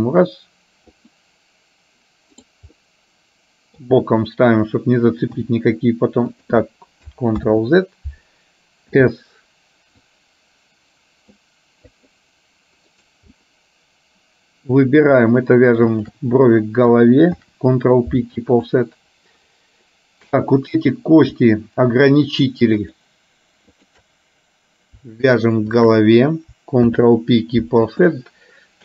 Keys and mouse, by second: 3.0 middle click, 7.2 ctrl+s, 7.6 ctrl+z, 9.0 c, 13.6-14.7 middle drag, 16.0 shift+click, 17.5 ctrl+p, 20.5 click, 23.0 shift+click, 23.8 shift+click, 25.8 shift+click, 27.0 ctrl+p.